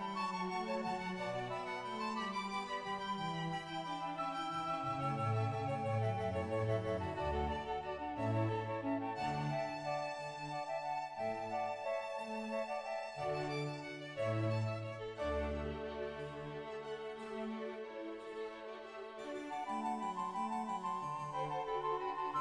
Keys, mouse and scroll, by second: 0.0-0.4 scroll up 6, 0.2 Tab, 0.6 shift+middle click, 2.4 ctrl+click, 3.0 scroll up 1, 3.2 shift+right click, 3.5-3.9 scroll down 1, 3.9 ctrl+right click, 3.9 g, 4.2 right click, 4.2 r, 5.5 shift+right click, 6.4 e, 7.1 scroll down 2, 7.4 shift+middle click, 7.4 scroll up 2, 7.5 click, 7.6-8.9 scroll down 1, 8.9 shift+middle click, 8.9 ctrl+right click, 9.3 o, 10.1 click, 10.5 Tab, 10.5 shift+middle click, 10.5 scroll up 1, 10.6-12.0 drag, 10.6 middle click, 12.0 right click, 12.7 shift+middle click, 12.7-15.6 scroll down 1, 15.6 click, 15.6-16.4 scroll down 2, 16.4 g, 16.7 click, 16.7 right click, 16.8 g, 17.4 right click, 17.5 click, 18.6 click, 19.1 Tab, 19.1-20.5 shift+middle drag, 20.5-22.4 scroll up 4.